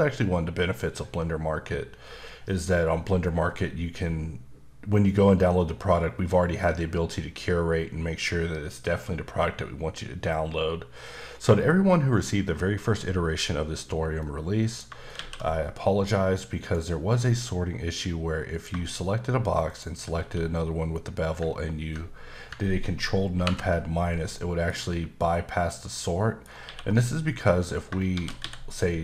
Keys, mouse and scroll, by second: 14.2 middle click, 15.1 shift+a, 16.3 click, 17.1 s, 18.5 click, 19.7 shift+click, 20.2 q, 23.4 ctrl+KP_Subtract, 24.3 middle click, 24.7 scroll up 2, 25.8 middle click, 26.6 q, 28.1 shift+d.